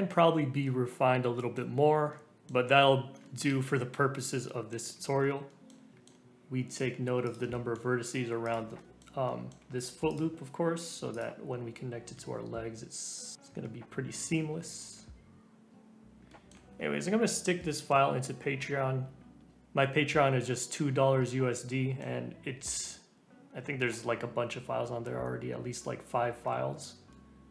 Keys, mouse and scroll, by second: 0.0 scroll up 2, 0.2 Tab, 0.6-1.6 middle drag, 1.6-2.1 scroll down 2, 2.1-3.6 middle drag, 3.6-4.4 scroll up 1, 4.4 middle click, 4.8-5.2 scroll down 1, 5.2 scroll up 1, 5.4-7.2 middle drag, 7.2 click, 7.5 middle click, 7.9 g, 8.7-10.0 middle drag, 10.0 alt+click, 11.1 click, 12.0 e, 13.3 scroll down 2, 13.6 middle click, 14.5 scroll up 2, 14.7-16.2 middle drag, 16.2 click, 16.3 middle click, 16.7 scroll up 2, 17.6-18.9 middle drag, 18.9-19.2 scroll down 2, 19.2 scroll up 1, 19.5-20.8 middle drag, 21.5-24.5 middle drag, 26.4-27.5 middle drag.